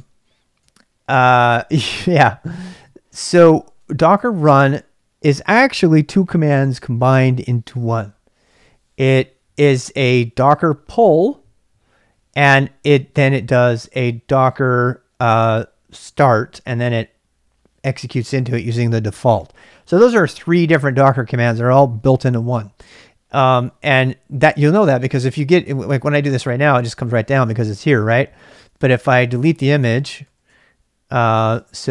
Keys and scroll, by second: 0.0 k, 0.6 k, 25.6 Return, 28.4 ctrl+c, 29.3-31.9 typing.